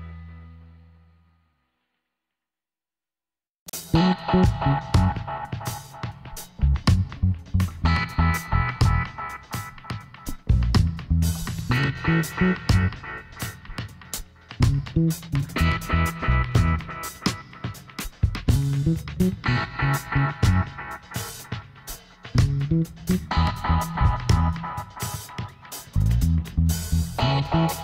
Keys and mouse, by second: 2.3-6.6 middle drag, 6.6 click, 7.2-8.6 middle drag, 9.7 Tab, 12.6 l, 13.3 l, 14.7 p, 16.8-18.6 drag, 19.1-21.0 middle drag, 21.0 Tab, 21.9 Tab, 22.5 click, 24.1 middle click, 25.2 Tab, 25.6 middle click, 27.2 click.